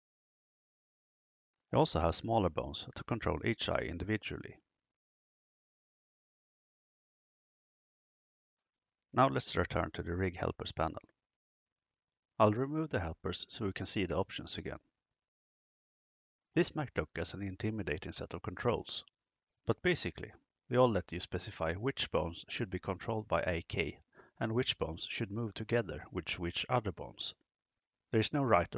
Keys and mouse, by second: 2.6 right click, 4.2 g, 5.8 click, 6.5 click, 9.5 KP_0, 14.8-28.7 drag.